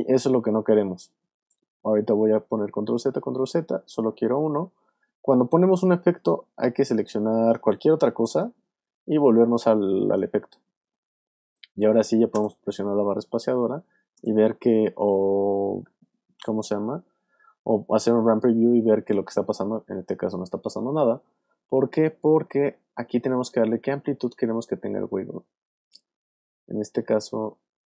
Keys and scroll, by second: 2.1 super+z, 12.3 space, 14.1 space.